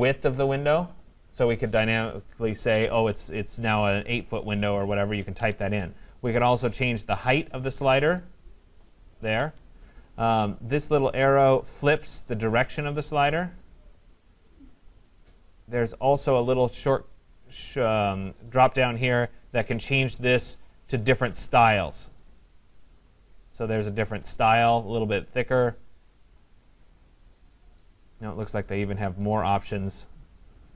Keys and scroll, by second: 5.3 Escape.